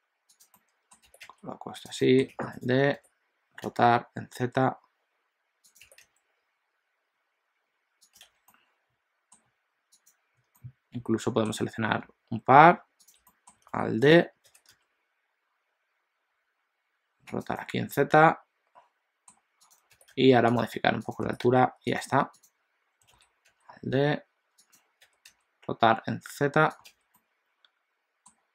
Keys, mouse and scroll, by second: 0.6 middle click, 1.1 g, 2.0 middle click, 2.4 alt+d, 3.0 r, 5.9 g, 8.2 alt+a, 8.4 middle click, 9.9 click, 10.5 middle click, 13.1 shift+click, 13.3 middle click, 13.7 alt+d, 14.5 r, 17.7 middle click, 19.6 click, 20.0 g, 21.2 click, 21.3 g, 22.5 click, 23.2 alt+d, 25.1 r, 27.0 alt+a, 27.1 middle click.